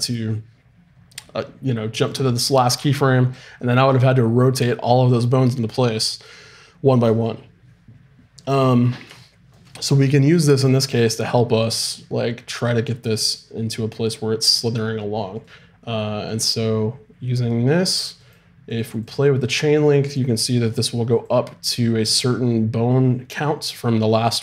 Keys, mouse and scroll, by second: 2.1-3.8 drag, 15.3-18.2 right drag, 18.2-24.4 drag.